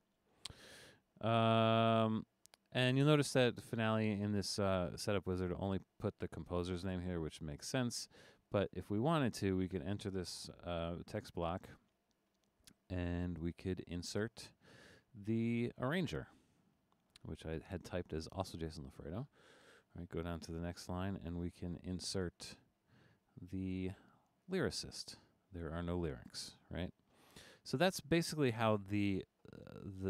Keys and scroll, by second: 11.2 Return, 19.6 Return.